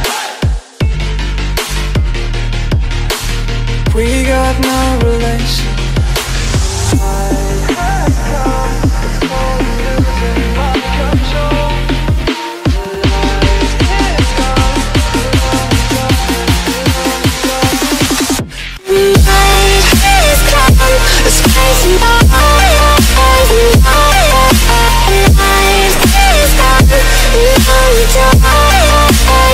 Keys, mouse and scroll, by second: 0.2 click, 2.2 click, 4.0 middle click, 4.0-4.4 scroll, 4.7 click, 5.5 click, 5.7 scroll, 6.6 scroll, 8.0 click, 8.3 click, 8.5-9.1 middle click, 9.9 click, 10.2 Delete, 10.4-11.3 scroll, 10.8 middle click, 11.8 click, 12.1 scroll, 13.5 click, 14.9 click, 15.7 click, 16.0 middle click, 16.5 z, 17.1 middle click, 19.8 click, 20.2 z, 20.9 click, 21.1 middle click, 22.3 click, 23.0 click, 24.1 click, 26.1 click, 28.7 click, 29.4 click.